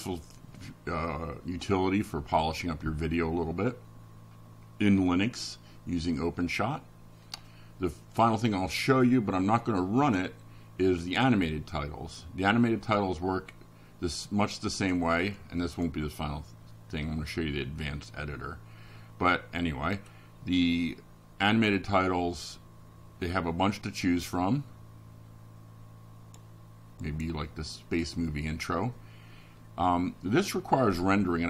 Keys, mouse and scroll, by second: 3.3 click, 10.9 click, 20.5 click, 22.3 scroll down 1, 22.9 scroll down 1, 23.5 scroll down 1, 24.9-25.3 scroll up 1, 25.6-25.9 scroll up 1, 30.6 click.